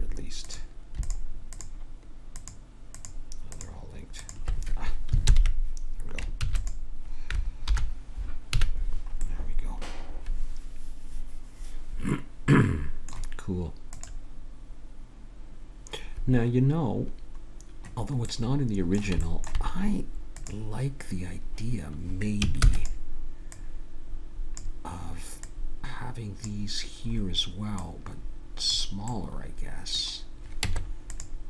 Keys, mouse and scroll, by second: 3.9-5.2 right drag, 5.2 ctrl+j, 6.4 ctrl+s, 7.7 alt+h, 8.6 a, 9.2 middle click, 18.4-19.8 middle drag, 20.4-22.1 drag, 22.6 shift+d, 23.5-27.1 drag, 27.1-30.6 middle drag, 30.6 Tab.